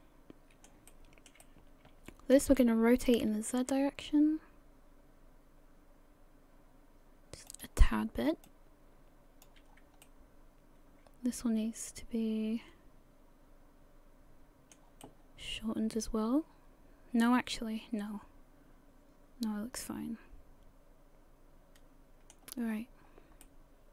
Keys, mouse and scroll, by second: 0.9 shift+middle click, 1.4 middle click, 2.9 r, 8.4 click, 9.7-10.0 scroll down 3, 10.0 middle click, 15.0 middle click, 22.7-23.4 scroll up 1, 23.4 middle click.